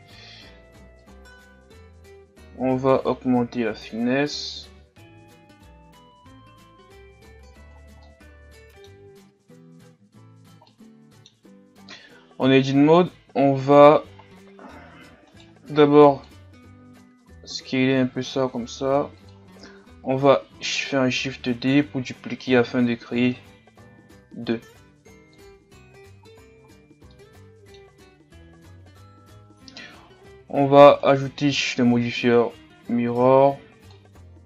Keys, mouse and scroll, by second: 8.1-9.8 middle drag, 9.8 a, 10.2-10.7 scroll down 4, 10.7-11.9 middle drag, 11.9 KP_3, 12.7-13.2 scroll up 1, 13.2 Tab, 14.2-15.3 scroll up 2, 15.3-16.3 right drag, 16.3 b, 17.2 s, 19.5 a, 19.7 a, 20.6 shift+d, 25.5 Tab, 25.9 a, 26.3-27.1 scroll down 5, 26.5 a, 27.1-28.4 middle drag, 28.4 KP_1, 30.2 scroll down 2, 30.5-31.1 scroll up 5, 31.1-34.4 right drag.